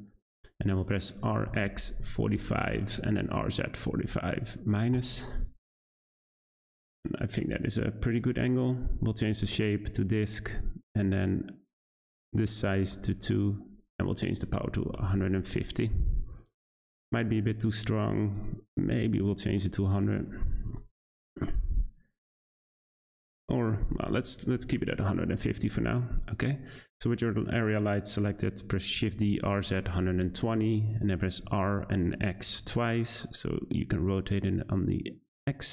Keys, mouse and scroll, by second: 1.2 r, 3.2 r, 5.9-6.6 middle drag, 6.6-7.0 scroll down 3, 7.0-9.3 shift+middle drag, 9.3-15.9 drag, 16.3 `, 18.3 click, 19.6 click, 20.6 0, 22.1-23.0 scroll up 3, 23.0-23.8 scroll down 1, 23.8-26.9 drag, 26.9-28.9 scroll down 1, 28.9 shift+d, 31.4 r.